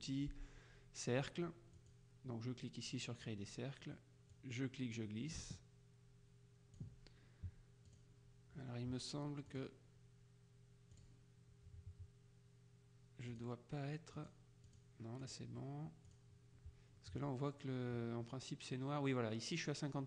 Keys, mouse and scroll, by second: 1.9 click, 4.4-7.3 drag, 8.0 click, 9.6 click, 11.1 click, 13.4 click, 14.3 click, 16.1 click.